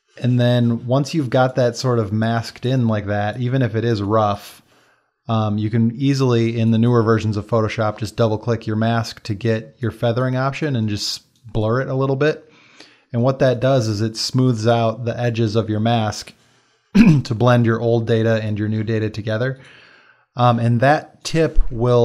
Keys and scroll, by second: 12.8 space, 18.0 space, 21.6 x.